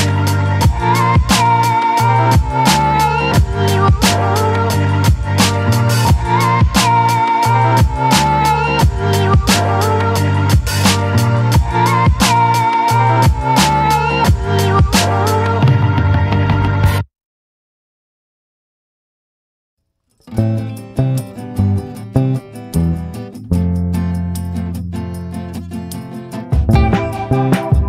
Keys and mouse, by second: 1.3 click, 2.2 click, 3.4 click, 5.0 ctrl+z, 5.8 click, 6.4 ctrl+z, 6.8 click, 7.3 click, 7.7 ctrl+z, 8.0 click, 8.9 click, 9.5 ctrl+z, 9.7 ctrl+z, 10.0 click, 10.6 ctrl+z, 10.9 click, 11.3 click, 11.7 ctrl+z, 12.0 click, 12.4 ctrl+z, 12.6 click, 13.6 click, 14.3 ctrl+z, 14.3 click, 15.2 ctrl+z, 15.4 click, 16.0 ctrl+z, 16.1 ctrl+z, 16.5 ctrl+z, 17.7 click, 18.7 ctrl+z, 18.8 ctrl+z, 19.3 click, 19.8 ctrl+z, 20.2-21.4 drag, 21.7 click, 23.1 click, 23.8 click, 24.3 ctrl+z, 24.6 click, 25.4 ctrl+z, 25.6-27.3 drag.